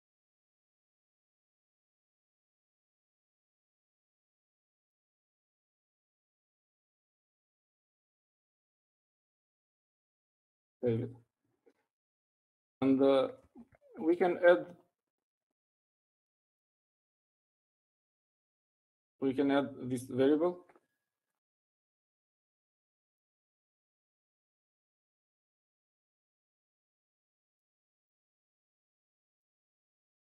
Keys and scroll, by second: 0.0-5.7 typing, 10.9-11.9 typing.